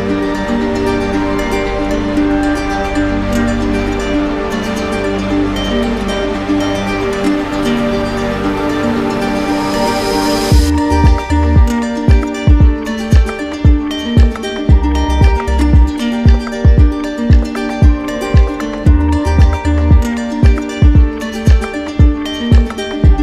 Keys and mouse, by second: 0.0 right click, 1.4 alt+right click, 2.3 shift+click, 3.2 right click, 4.6 alt+right click, 6.4 right click, 8.1 right click, 10.9 right click, 12.9 click, 16.2 ctrl+click, 17.2 right click, 17.7 ctrl+z.